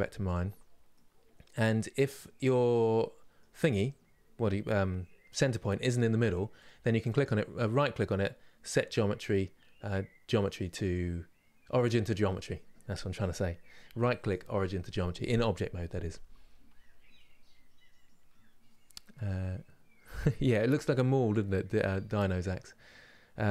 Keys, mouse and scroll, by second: 0.0-6.3 middle drag, 6.3 click, 22.0-23.5 scroll down 1.